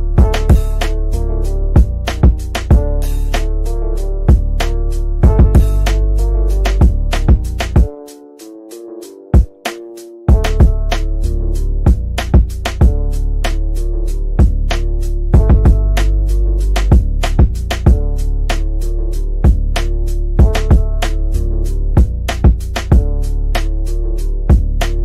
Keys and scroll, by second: 18.4 F3, 19.2 Escape.